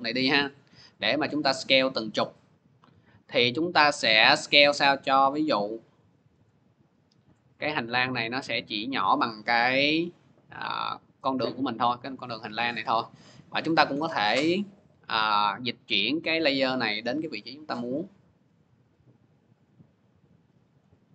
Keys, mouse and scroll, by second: 0.1 middle click, 2.4 scroll, 4.0-5.2 middle drag, 6.2 click, 6.7 middle click, 8.7 middle click, 11.1 middle click, 14.8-16.2 middle drag, 16.4-19.0 drag, 20.5 click.